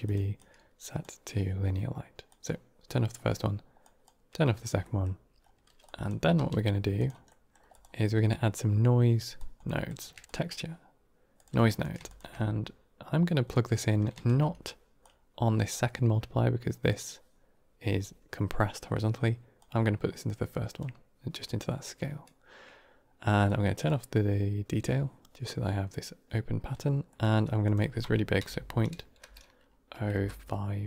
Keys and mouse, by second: 0.3 click, 2.2 click, 3.0 middle click, 3.7 click, 4.7 middle click, 5.8 drag, 6.2 g, 7.2 middle click, 7.6 click, 9.3 drag, 9.6 g, 9.7 click, 10.0 shift+a, 12.0 ctrl+shift+click, 13.3 middle click, 14.9-16.7 drag, 19.5-20.7 drag, 23.4 click, 27.0 middle click, 27.5-30.6 drag.